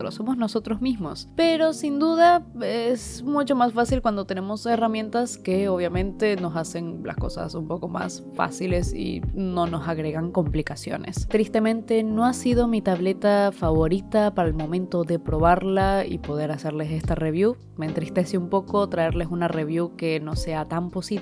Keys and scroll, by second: 0.0-1.6 typing, 2.7 i, 3.2 space, 4.0 i, 5.7-8.0 typing, 9.4-12.1 typing, 13.2-15.6 typing, 16.7-18.6 typing, 17.3 ctrl+z, 20.0-21.2 typing.